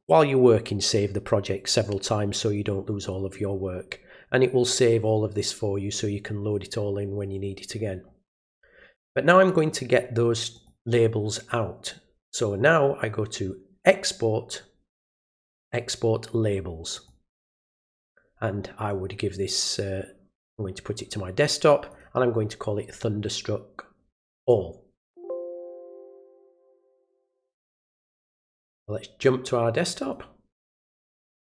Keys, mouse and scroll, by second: 9.0 click, 10.5 click, 16.9 click, 21.9 click, 24.9 click, 26.4 click, 28.6 click, 30.0 click, 31.1 click.